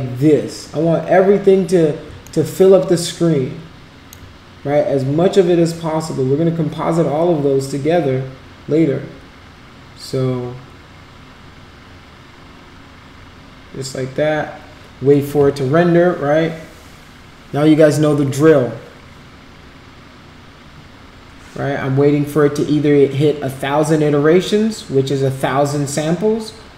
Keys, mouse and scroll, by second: 2.3-4.2 alt+middle drag.